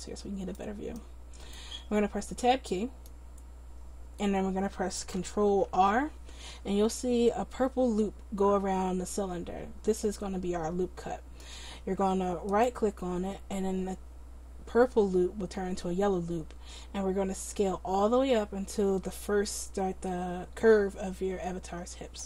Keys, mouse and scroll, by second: 1.7-2.7 drag, 2.6 right click, 5.7 ctrl+r, 9.2-22.2 middle drag.